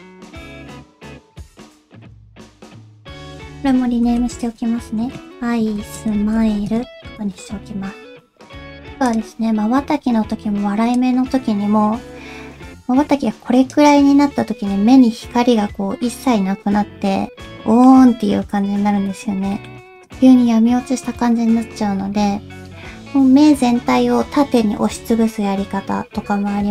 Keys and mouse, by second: 0.7 middle click, 1.9 g, 2.0 click, 2.2 g, 3.2-6.7 drag, 4.1 shift+e, 9.0 click, 11.0-13.8 drag, 14.8-17.1 middle drag, 17.6 middle click, 19.6 middle click.